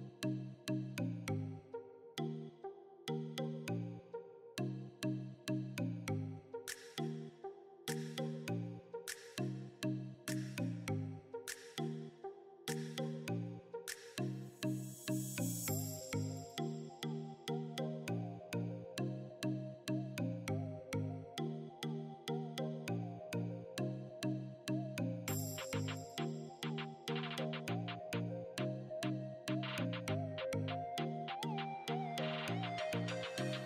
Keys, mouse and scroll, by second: 15.8 click, 19.6-28.0 drag, 28.8 click.